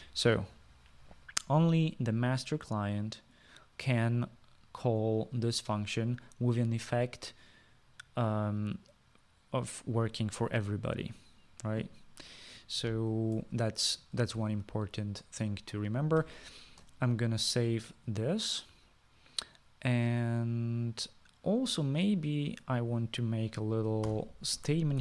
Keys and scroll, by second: 0.0-0.6 typing, 17.5 ctrl+s.